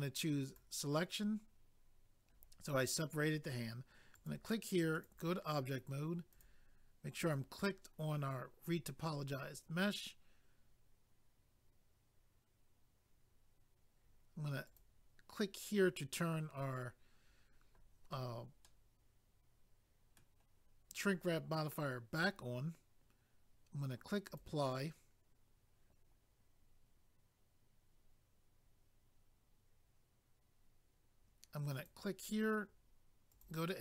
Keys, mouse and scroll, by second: 0.5 click, 0.6 click, 4.1 click, 4.3 click, 4.9 click, 5.1 click, 6.3 click, 6.4 click, 7.2 click, 7.3 click, 14.6 click, 14.8 click, 18.6 middle click, 24.2 click, 24.4 click, 31.7 click, 31.8 click, 33.3 click.